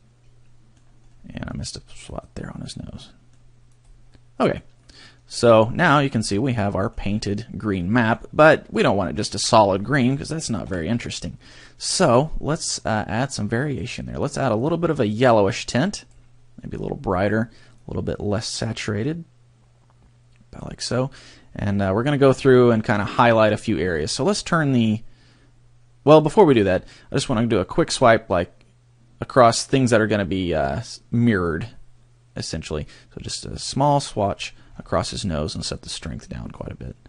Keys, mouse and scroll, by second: 1.1 middle click, 2.2 click, 3.0 middle click, 3.8 click, 4.2 middle click, 4.8 middle click, 6.0-6.4 scroll down 4, 6.6 middle click, 7.6 middle click, 8.3 middle click, 9.4 middle click, 10.6 KP_3, 11.4 scroll up 2, 12.8 click, 15.0 click, 16.7 click, 17.8 click, 21.2 scroll up 2, 22.5 shift+middle click, 24.0-24.8 scroll down 7, 33.4 click, 34.6 scroll up 5, 35.8 click.